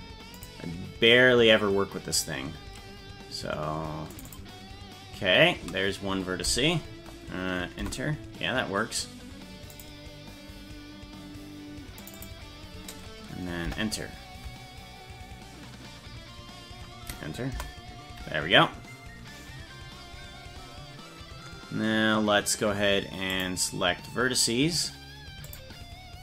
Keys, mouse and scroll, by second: 0.4-8.1 drag, 9.8-17.9 drag, 23.4 click, 25.5 click.